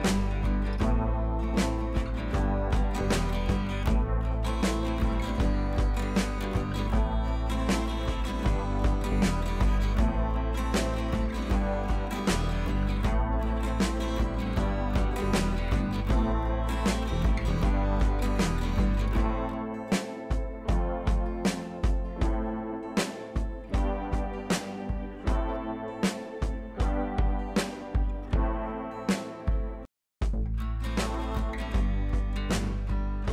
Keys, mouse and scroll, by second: 1.8 alt+Num_Lock, 1.8-2.3 scroll down 1, 3.2 click, 5.6 shift+click, 7.0-8.5 shift+drag, 11.5 ctrl+t, 12.6-13.5 alt+drag, 17.4-17.7 scroll down 1, 17.8 ctrl+z, 19.0 click, 19.2-19.9 scroll up 1, 19.9-20.4 drag, 22.4 scroll up 1, 22.9 ctrl+t, 23.2-23.5 drag, 28.5 ctrl+t, 28.8-29.4 drag.